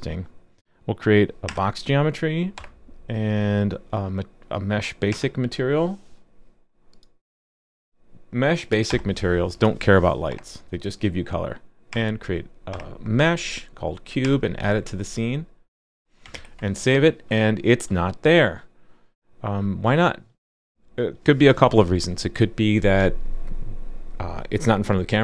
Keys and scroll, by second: 16.3 super+s.